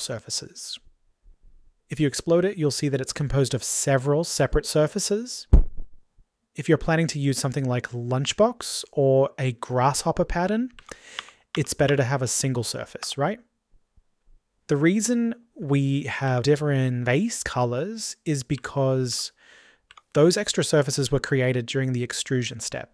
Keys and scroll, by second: 11.0 ctrl+z.